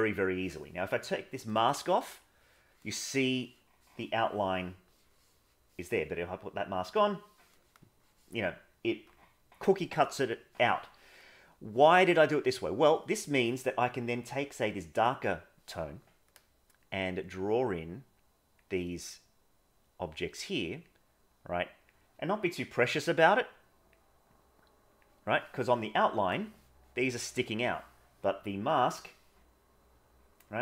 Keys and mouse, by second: 2.4 middle click, 11.6 middle click, 12.7 middle click, 16.8-18.6 drag, 19.1 click, 20.8-21.9 drag, 23.3 click, 24.3 click, 28.6 click.